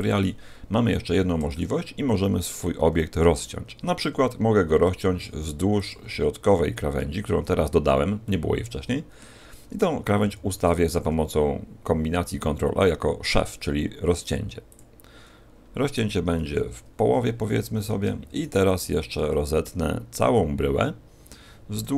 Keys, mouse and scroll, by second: 0.9 a, 1.5 shift+middle click, 5.1 ctrl+r, 8.2 middle click, 16.4 KP_1, 17.6 a, 18.4 alt+shift+right click, 19.2 middle click, 21.8 KP_1.